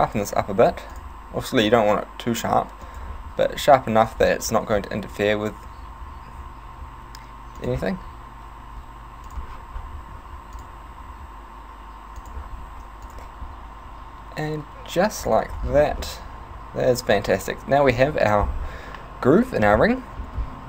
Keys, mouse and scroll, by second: 0.6 ctrl+r, 3.1 click, 3.4 ctrl+r, 7.7 click, 9.3 click, 10.2 ctrl+r, 12.3 click, 12.7 ctrl+r, 15.3 click, 15.6 Tab, 15.6 scroll down 6, 16.0 middle click.